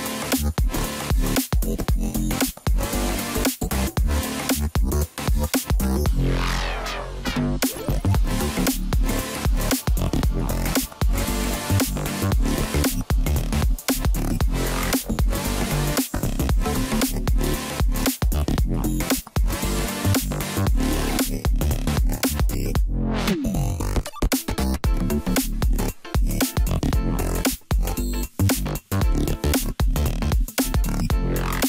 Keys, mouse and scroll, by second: 3.4 click, 4.2-5.3 scroll down 2, 5.3 e, 8.6 g, 11.4-12.1 scroll down 1, 12.1 g, 14.1 g, 15.8 r, 19.8 scroll down 2, 20.0-21.8 middle drag, 21.8-22.7 scroll up 4, 22.7 KP_1, 23.8 Tab, 24.2 scroll down 2, 24.4-26.2 middle drag, 26.2 drag, 26.6 scroll down 2, 27.2-27.9 scroll down 2, 27.9-28.3 drag, 28.3-29.0 scroll down 1, 29.0 click, 29.4-30.9 middle drag, 30.9 KP_1.